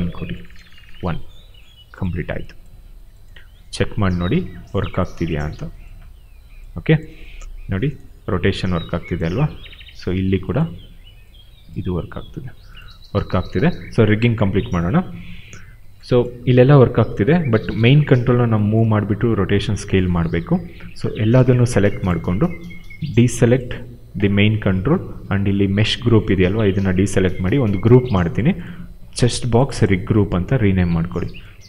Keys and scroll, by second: 0.4 1, 0.5 Return, 8.2 e, 9.2 ctrl+z, 12.1 ctrl+z, 13.4 ctrl+a, 17.9 w, 18.7 ctrl+z, 27.7 ctrl+g, 29.0 ctrl+c, 30.2 ctrl+v.